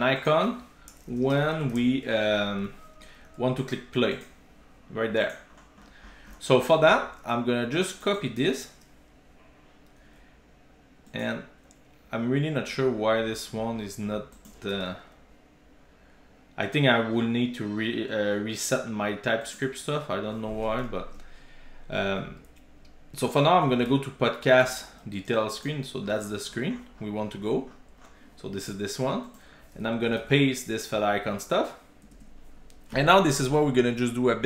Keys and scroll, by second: 8.3 super+c, 11.3 super+b, 21.1 shift+super+o, 25.6 super+b, 30.2 super+v.